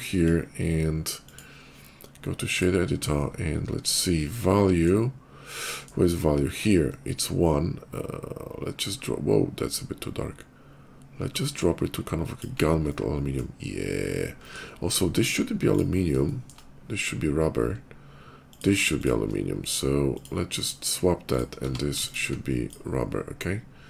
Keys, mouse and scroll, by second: 1.1 click, 2.3 click, 3.3 middle click, 3.5 middle click, 3.7 middle click, 4.0 middle click, 5.3 middle click, 6.9-12.2 drag, 12.6 shift+middle click, 14.3 middle click, 14.7 middle click, 15.5 click, 15.8 middle click, 16.1 middle click, 16.5 middle click, 18.3 shift+click, 18.8 click, 19.9 click, 20.2 click, 21.1 click, 21.4 q, 21.9 click, 22.5 q.